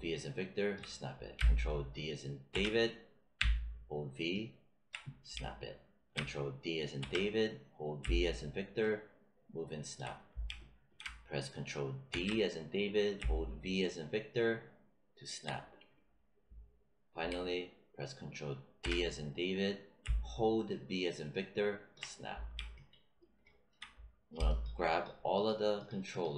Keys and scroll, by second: 2.4 ctrl+d, 3.3 v, 6.9 ctrl+d, 7.9 v, 12.0 ctrl+d, 13.1 v, 18.7 ctrl+d, 19.9 v.